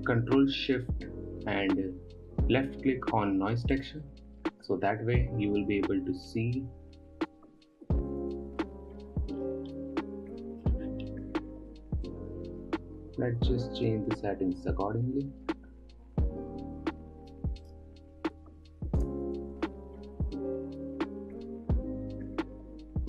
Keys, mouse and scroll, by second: 4.4 ctrl+shift+click, 7.4-9.3 scroll down 4, 9.3-10.0 scroll down 1, 10.0-11.5 middle drag, 11.5-12.3 scroll up 4, 12.3 scroll up 1, 12.5-15.6 drag, 18.1-21.2 drag.